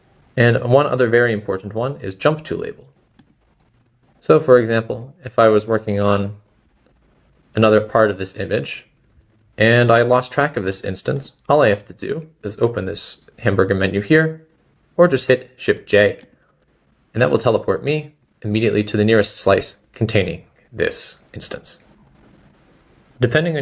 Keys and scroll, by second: 6.4 typing, 21.3 typing, 22.5 typing.